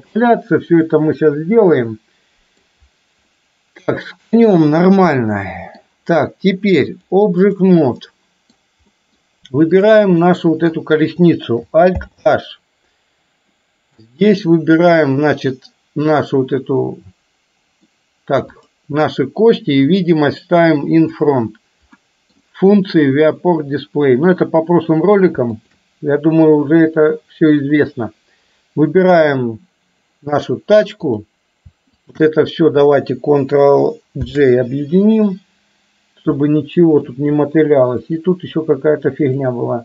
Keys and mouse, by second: 0.0-0.9 middle drag, 1.9-2.7 middle drag, 3.4-5.9 middle drag, 7.0 click, 8.0 middle click, 9.0 middle click, 9.8 click, 10.3 middle click, 12.0 alt+h, 13.7 middle click, 14.9 click, 16.5-18.0 middle drag, 18.7 click, 19.9 click, 22.0 middle click, 25.7 shift+click, 31.2 click, 32.2 shift+click, 34.3 ctrl+j, 36.4-37.2 middle drag, 39.3 click.